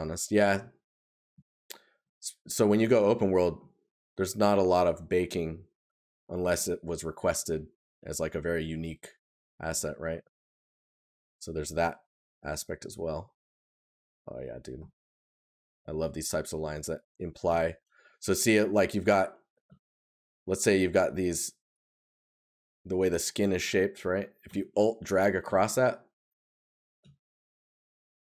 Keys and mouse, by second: 1.9 right click, 9.5 right click, 18.9 right click, 22.1 right click.